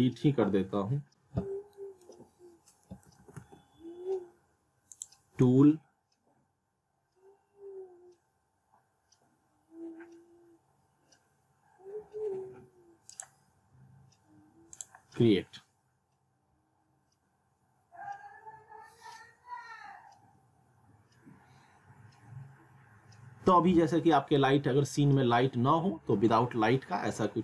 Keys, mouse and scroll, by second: 0.5 scroll down 1, 1.0 scroll up 1, 1.8 middle click, 3.2 alt+w, 3.5 alt+w, 4.9 click, 13.1 click.